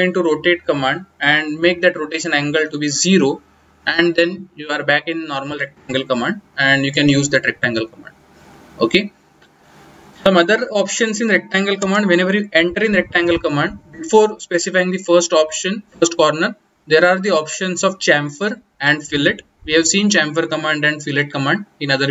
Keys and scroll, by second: 9.7-11.7 typing.